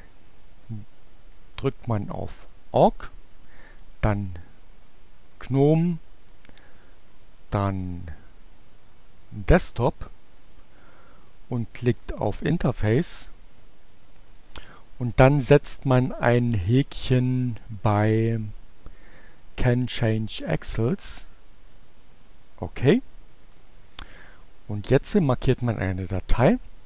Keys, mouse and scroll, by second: 1.1 click, 3.5 click, 4.4 click, 7.2-8.9 drag, 9.0 click, 10.5-12.3 drag, 16.3 click, 21.4 click, 23.3 click.